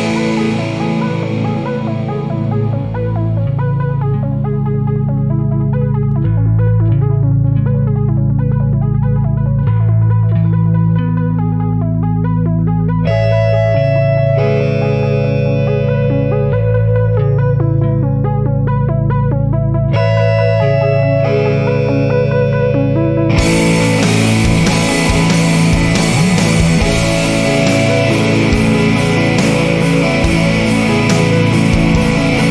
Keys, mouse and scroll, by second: 0.3 click, 1.5 ctrl+click, 7.3 click, 9.0 click, 10.4 click, 10.7-12.3 drag, 12.6 0, 13.2 scroll down 2, 13.7 scroll up 2, 14.3 1, 14.7 2, 15.3 scroll down 2, 15.8-16.5 scroll up 4, 16.6 scroll down 2, 17.3 scroll up 2, 20.1 click, 21.8 click, 25.2 click, 26.7 click, 28.0 click, 29.2 click, 29.8 click, 32.0 4.